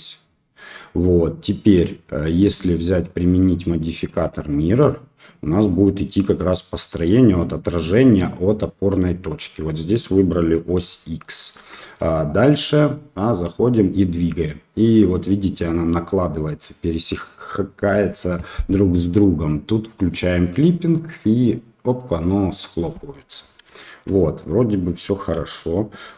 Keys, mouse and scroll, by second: 2.9-4.9 drag, 11.2-11.6 shift+drag, 11.8 Tab, 13.2-17.6 drag, 20.0 click, 21.0-22.1 drag, 22.5 middle click, 23.7 shift+middle click.